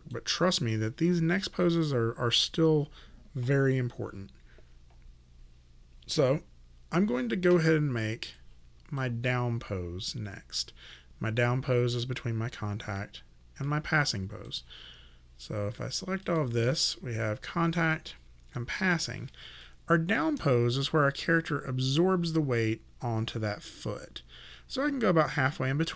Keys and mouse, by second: 8.4 click, 13.7 click, 16.2 click, 17.8 shift+., 19.7 click.